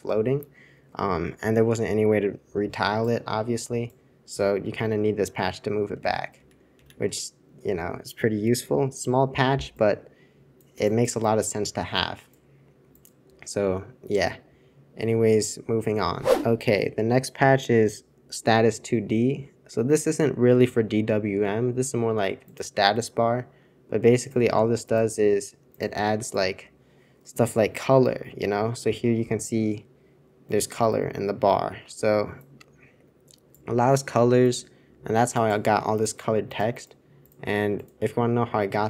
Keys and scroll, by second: 4.8 super+z, 6.0 super+c, 6.3 super+c, 6.7 super+c, 7.0 super+2.